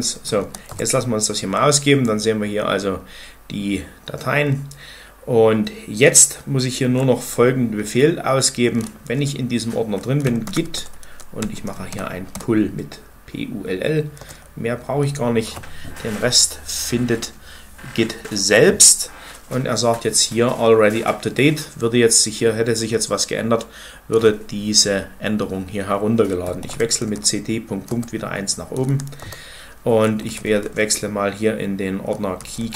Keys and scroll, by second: 0.0-0.2 typing, 0.5 Return, 9.9-12.5 typing, 14.0 Return, 26.2-30.6 typing, 27.7 Return, 29.0 Return, 32.1-32.7 typing.